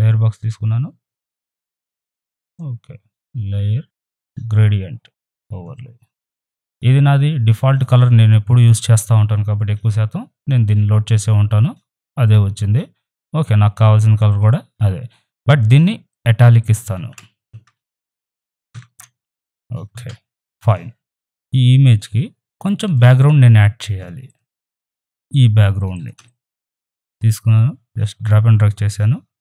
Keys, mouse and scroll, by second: 1.0 F7, 1.2 click, 5.2 click, 6.7 click, 12.2-14.3 drag, 16.9 ctrl+a, 18.7 ctrl+shift+i, 21.0-22.1 drag, 22.8 click, 25.1 right click, 25.3 click, 26.2-29.4 ctrl+drag.